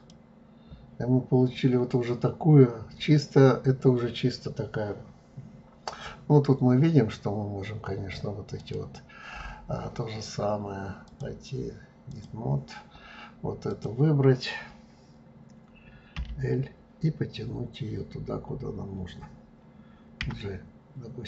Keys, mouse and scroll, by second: 0.0 click, 1.0-1.4 scroll down 3, 1.4-3.1 scroll up 8, 3.1-3.6 scroll down 3, 4.4-5.0 scroll down 3, 5.0-8.4 scroll up 7, 8.6 click, 11.1-14.0 drag, 16.2 l.